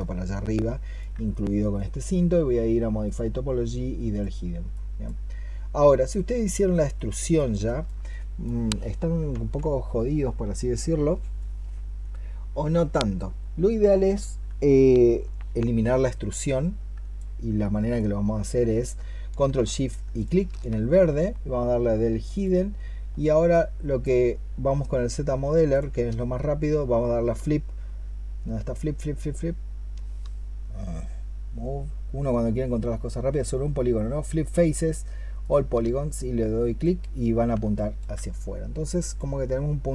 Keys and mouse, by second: 7.5 alt+click, 20.0 ctrl+shift+click, 27.2-35.6 space, 37.6 alt+click.